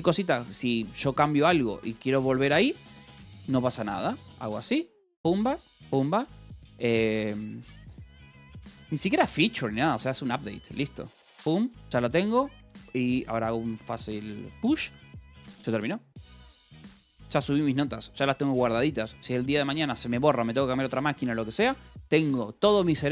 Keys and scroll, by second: 4.5-10.7 typing, 10.7 Return, 14.3 shift+p, 16.9 q.